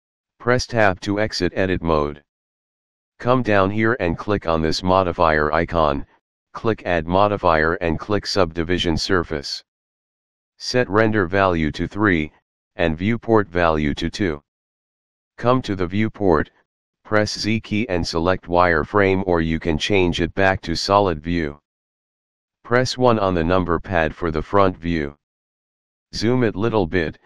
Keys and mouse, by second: 0.5 Tab, 4.0 click, 5.7 click, 12.8 click, 13.9 click, 16.8 z, 17.4 z, 18.1 click, 20.2 z, 21.1 click, 23.2 KP_1.